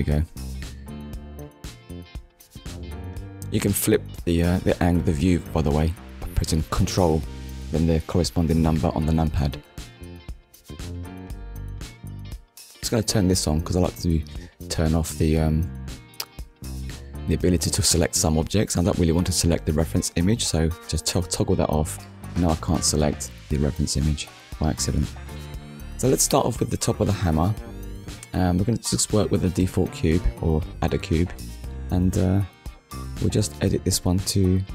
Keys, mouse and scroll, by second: 1.4 ctrl+KP_1, 3.4 KP_1, 4.7 middle click, 7.4 KP_1, 9.4 click, 12.9 click, 20.5 click, 21.1 click, 21.7 click, 23.8 click, 25.1 scroll up 1, 25.7 shift+middle click, 26.7 click, 29.6 click, 30.4 click.